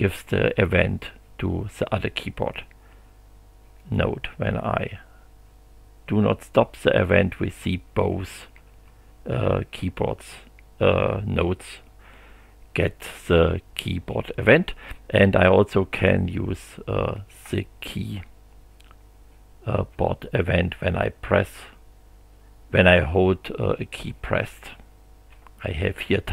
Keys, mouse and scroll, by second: 3.8 click, 6.6 g, 8.0 g, 19.9 g.